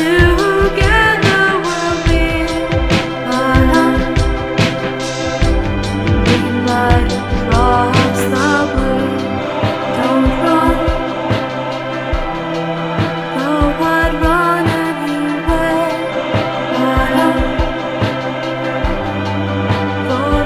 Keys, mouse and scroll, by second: 2.7 z, 9.2 click, 11.5 shift+c, 16.5 r.